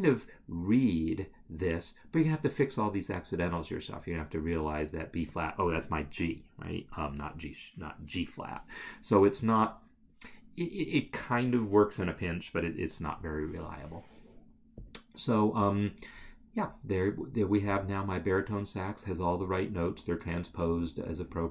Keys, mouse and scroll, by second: 14.8 click.